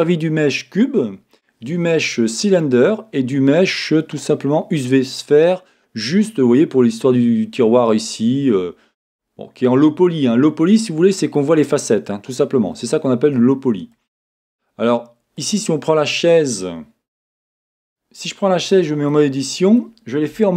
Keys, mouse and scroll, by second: 7.7-9.7 scroll up 2, 9.7-10.7 scroll down 2, 15.4 click, 17.3 w, 17.5 click, 18.7 Tab, 19.1-20.5 middle drag.